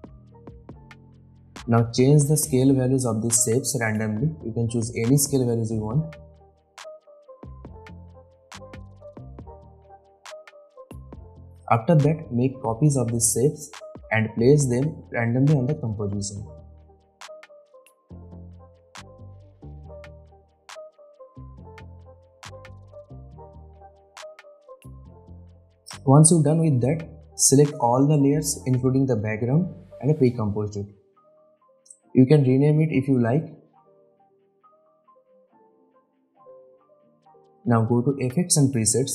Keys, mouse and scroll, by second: 1.7 s, 2.5 click, 3.9 Return, 5.0 click, 5.6 s, 6.0 click, 7.4 Return, 9.2 click, 11.4 ctrl+d, 11.8-13.1 drag, 13.2 ctrl+d, 13.4-14.4 click, 14.4 ctrl+d, 14.5 ctrl+s, 14.5 ctrl+click, 15.0 click, 15.8-16.2 ctrl+d, 16.2 click, 16.3 ctrl+d, 16.5 click, 16.6-17.0 ctrl+d, 17.1 ctrl+d, 17.1 click, 17.4 ctrl+d, 17.4-17.7 click, 17.8 ctrl+d, 17.9 click, 18.1 ctrl+d, 18.2-18.5 click, 18.6 ctrl+d, 18.7 click, 19.0 ctrl+d, 19.0-19.4 ctrl+click, 19.5 click, 19.6 ctrl+d, 19.7 click, 19.9 ctrl+d, 19.9-20.2 ctrl+click, 20.3 ctrl+d, 20.3-20.7 click, 21.1 click, 21.3 ctrl+d, 21.5 click, 22.1 ctrl+d, 22.2-22.5 click, 22.7 click, 22.8 ctrl+d, 22.9 click, 23.7 scroll down 1, 23.8 scroll up 1, 24.0-24.7 drag, 25.2-25.8 scroll up 1, 25.8 click, 27.2 click, 28.5 shift+click, 29.0 right click, 30.0 click, 32.5-32.8 drag.